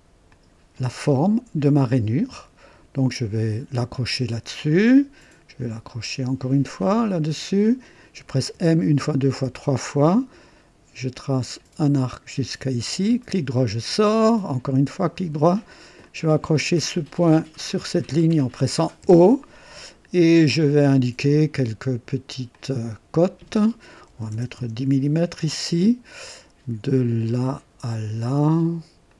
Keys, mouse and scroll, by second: 0.3 click, 3.9 click, 6.8 click, 8.5-9.4 typing, 12.0 click, 13.2 right click, 14.1 right click, 16.0 click, 16.2 typing, 17.7 click, 19.0 typing, 20.8 click, 22.5 click, 24.0-24.8 typing, 24.6 Return, 27.3 click, 28.9-29.1 typing, 29.0 click.